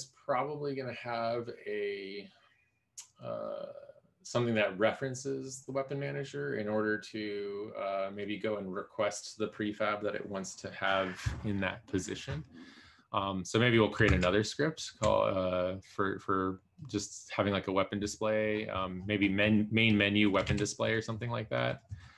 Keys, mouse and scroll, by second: 20.6 ctrl+d.